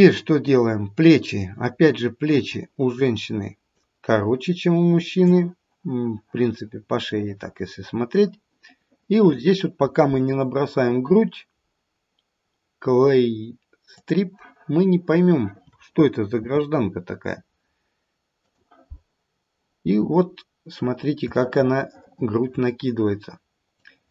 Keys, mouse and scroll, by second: 2.1 click, 3.0 click, 4.4 click, 14.0 click, 16.3 f, 20.3-21.2 scroll up 2, 21.5 shift+middle click, 23.7 click.